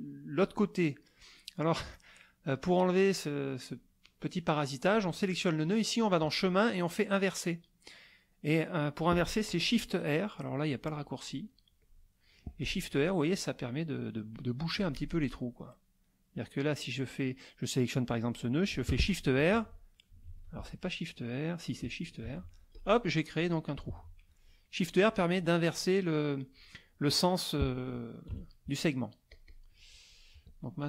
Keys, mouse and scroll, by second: 4.9 click, 6.0 click, 11.8 click, 12.9 click, 14.8 click, 16.3 click, 18.1 click, 19.5 ctrl+r, 20.3 ctrl+r, 22.2 shift+r, 22.7 shift+click, 23.4 click, 23.9 shift+r, 27.7 middle click, 28.3 KP_Subtract, 28.9 middle click, 29.3 click, 29.8 middle click.